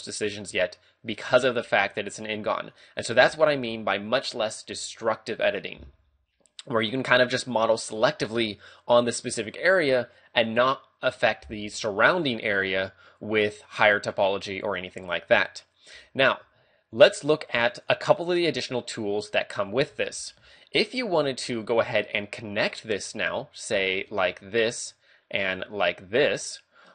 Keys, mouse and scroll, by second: 2.6 right click, 3.5 a, 16.9 ctrl+Tab, 23.8 d, 23.9 ctrl+click, 25.7 ctrl+click.